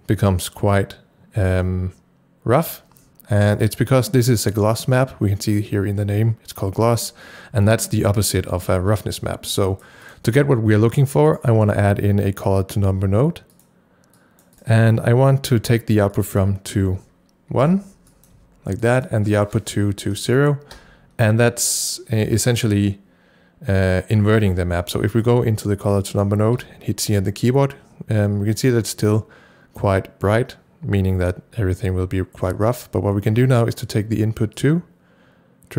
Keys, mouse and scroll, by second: 4.4 double click, 9.3-13.5 drag, 11.3 right click, 14.2 click, 14.5 double click, 14.7 click, 16.1 click, 17.6 1, 18.1 click, 18.4 1, 18.8 click, 20.2 KP_0, 20.8 KP_Enter, 25.4-30.0 drag, 26.6 c, 31.0 c, 32.6 c, 34.6-35.7 drag.